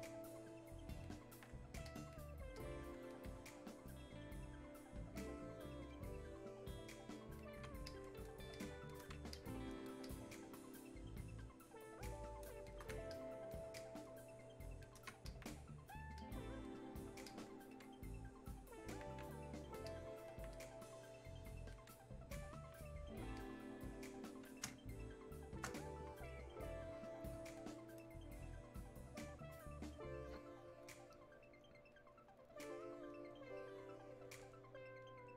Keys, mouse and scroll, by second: 19.9-23.4 alt+drag, 24.7 space, 25.2 click, 25.2 space, 26.1-35.3 drag.